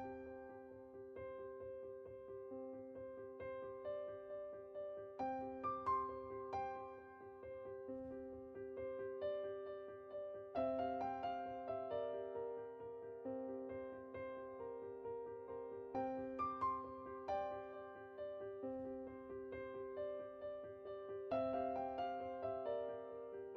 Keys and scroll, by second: 2.7 typing, 11.6 Tab.